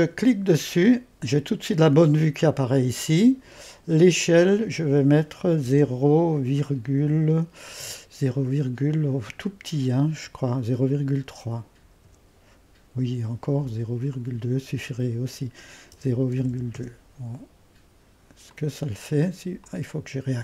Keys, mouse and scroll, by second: 0.2-3.4 drag, 4.2-5.7 drag, 5.7 typing, 7.0 typing, 11.0 typing, 12.1 Return, 14.1-15.9 drag, 15.7-17.0 typing, 18.5-20.4 drag, 19.4-20.2 typing.